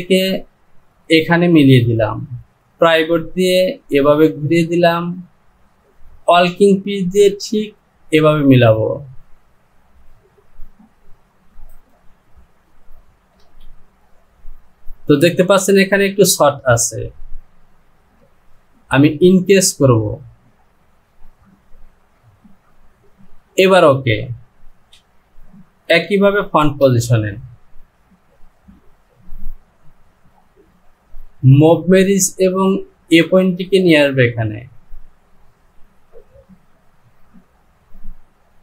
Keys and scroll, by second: 13.4 Return, 24.7 Home.